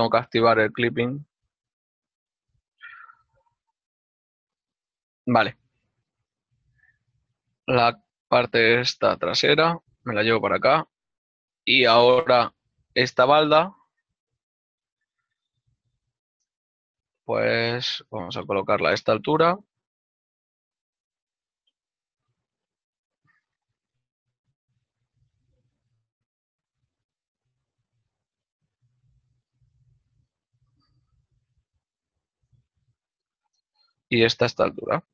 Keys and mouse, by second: 1.5 click, 1.7 g, 4.3 middle click, 8.7 right click, 8.8 z, 10.1 ctrl+click, 10.5 ctrl+middle click, 12.7 click, 13.2 right click, 13.5 shift+middle click, 16.3-17.6 typing, 19.3 shift+middle click, 25.6 click, 27.1 y, 30.9 ctrl+click, 31.0 ctrl+z, 32.3 s, 33.3 ctrl+middle click, 34.8 z.